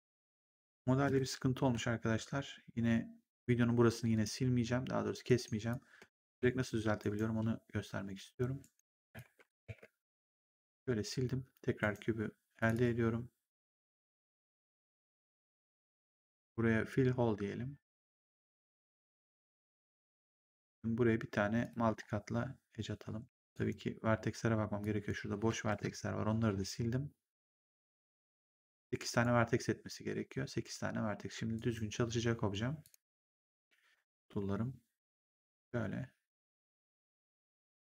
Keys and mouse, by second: 0.3 click, 0.9 BackSpace, 4.0 click, 5.1 right click, 5.6 click, 6.3 Delete, 6.9 right click, 8.5 right click, 9.1 click, 9.5 Delete, 10.1 right click, 11.7 right click, 12.5 click, 15.4 click, 18.4 click, 21.5 click, 23.1 w, 23.4 right click, 24.7 click, 25.6 BackSpace, 28.7 click, 31.5 right click, 32.7 click, 36.1 ctrl+click, 36.6 w, 36.8 right click, 37.2 click.